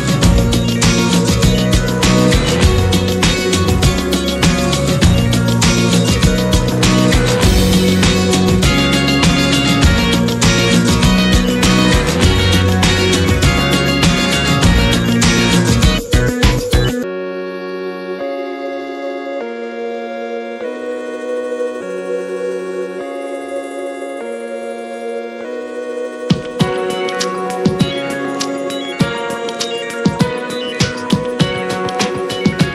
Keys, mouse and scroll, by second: 0.8 scroll down 3, 1.1-1.8 middle drag, 1.8 click, 3.1 `, 3.6-5.8 middle drag, 5.8-6.3 scroll down 10, 6.3-8.2 shift+middle drag, 8.2-8.9 drag, 9.1-16.5 drag, 16.8-24.3 drag, 29.7-32.7 drag.